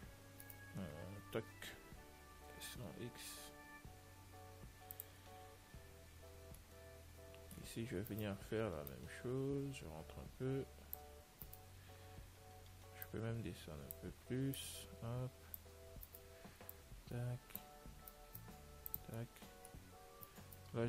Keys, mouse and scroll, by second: 0.7-2.7 right drag, 1.7 l, 6.9-8.4 middle drag, 8.4-10.2 right drag, 9.2 click, 11.1 click, 11.8-13.6 right drag, 13.4-16.6 drag, 16.3-18.0 right drag, 17.0 click, 18.4-20.4 right drag, 19.4-20.8 middle drag, 20.5-20.8 right drag.